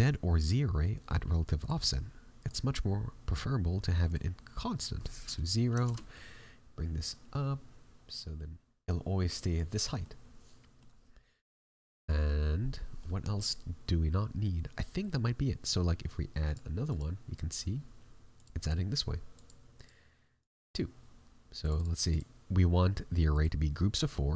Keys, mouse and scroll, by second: 1.5 click, 9.7-10.1 scroll down 2, 10.0 middle click, 16.4 click.